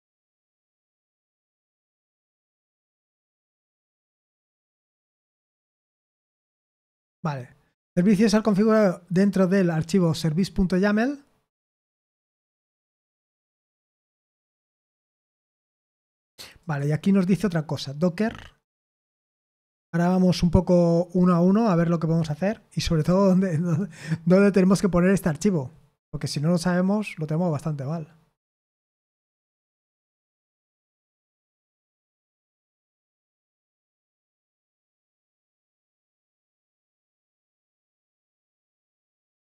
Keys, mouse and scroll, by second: 0.8 click, 2.1 click, 2.6 click, 4.1 click, 11.4-12.8 scroll down 2, 12.8-13.7 scroll up 2, 13.7-16.6 scroll down 4, 16.6 click, 24.3-28.3 scroll up 1, 29.6 click, 30.0 click, 32.3 click, 34.0-34.6 scroll down 2, 36.5-37.8 scroll down 2, 37.8-38.3 scroll down 1, 38.9-39.4 scroll up 2.